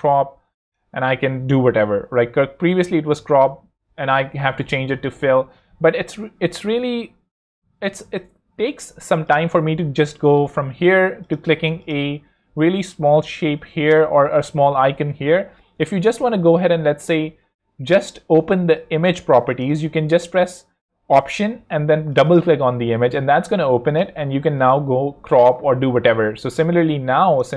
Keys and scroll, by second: 10.4 Escape, 11.7 super+Escape, 21.7 alt+Escape, 25.7 ↺.